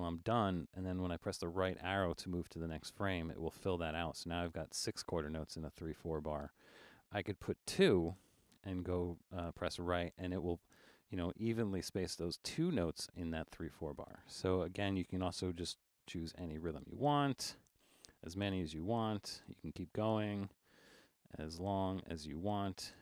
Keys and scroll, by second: 0.2 typing, 1.6 Right, 7.3 5, 9.2 Right, 14.9-20.0 typing, 21.2 typing, 22.3 4.